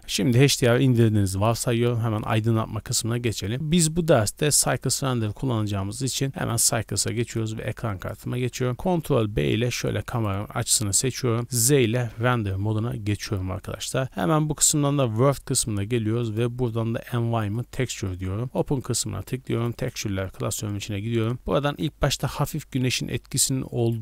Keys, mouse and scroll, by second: 3.1 click, 8.7 ctrl+b, 11.4 z, 13.8 click, 16.3-18.0 drag, 18.4 click.